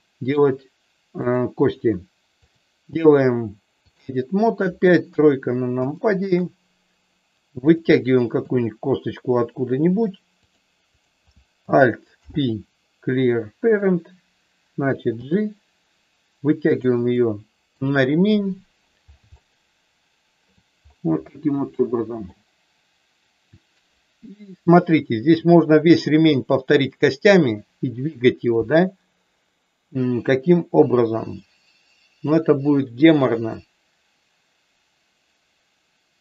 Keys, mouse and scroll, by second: 1.2 click, 2.3-4.1 drag, 5.1 KP_3, 5.9 shift+middle click, 7.7 click, 8.3 e, 10.3 click, 10.9 click, 12.2 alt+p, 15.1 g, 16.7 click, 17.1 middle click, 19.3-20.4 shift+middle drag, 21.7 shift+middle click.